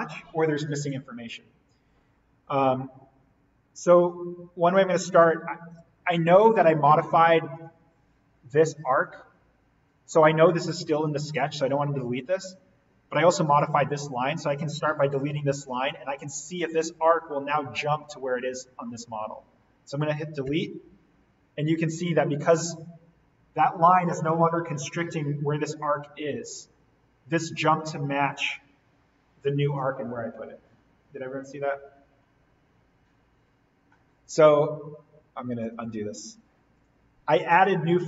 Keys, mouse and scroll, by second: 7.5 click, 8.0-10.3 scroll up 1, 11.0-13.4 scroll down 1, 13.4 click, 16.2-19.2 scroll up 1, 20.4 Delete, 21.4 scroll up 1, 23.5-25.9 scroll down 1, 25.9 click, 26.4 scroll up 1, 27.3 click, 34.9-35.6 scroll down 1, 36.1 ctrl+z, 36.8 click.